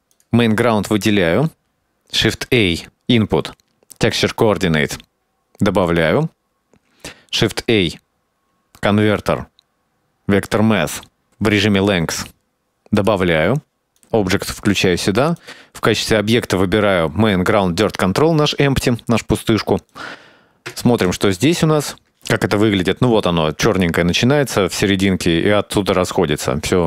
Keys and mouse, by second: 0.0 click, 0.5 click, 1.0 middle click, 1.5 middle click, 2.3 shift+a, 8.0 shift+a, 12.4 middle click, 12.8 click, 14.1-14.8 drag, 15.5 click, 20.0-20.8 drag, 21.4 ctrl+shift+click.